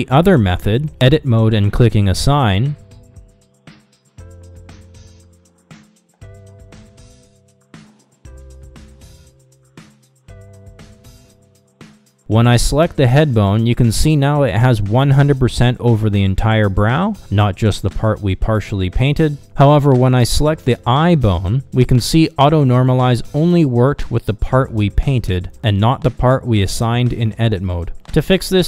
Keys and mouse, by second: 0.9 Tab, 2.4 a, 6.1 click, 12.6 ctrl+Tab, 14.9-18.8 middle drag, 20.3 click, 21.7-27.9 middle drag.